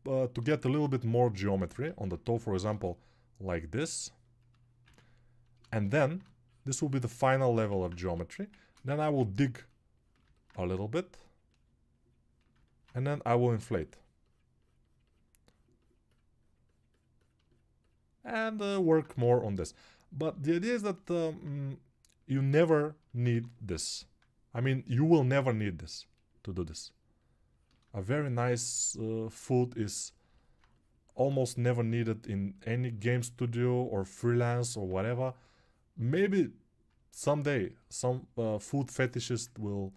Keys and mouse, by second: 5.1 ctrl+r, 8.5 2, 20.3 alt+g, 25.0 ctrl+[.